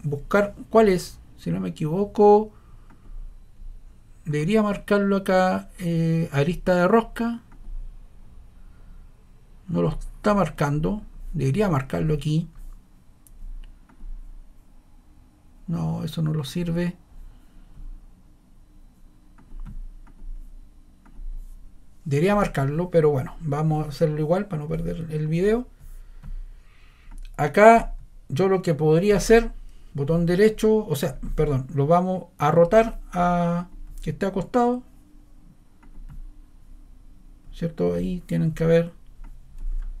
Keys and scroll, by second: 39.9-40.0 typing.